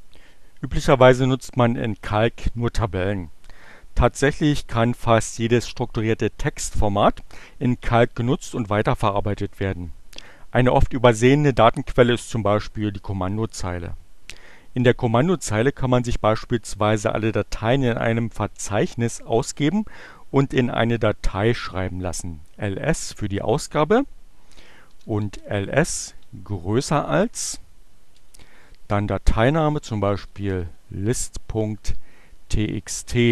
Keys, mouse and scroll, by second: 22.7 click, 24.7-25.7 typing, 27.6 space, 28.6 l, 29.8-31.3 typing, 32.6-33.3 typing.